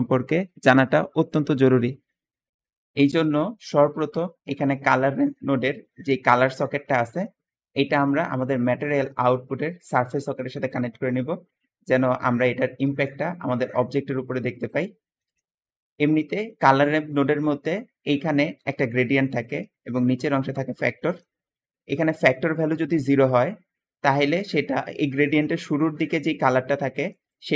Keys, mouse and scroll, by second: 7.1-10.6 drag, 15.1 Escape, 16.2 middle click, 18.3 click, 21.2 Escape.